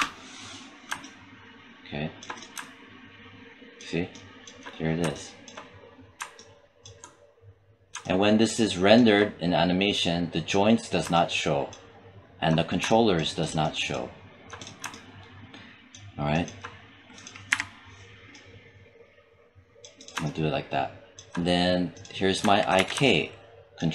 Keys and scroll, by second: 17.3 e, 22.6 w.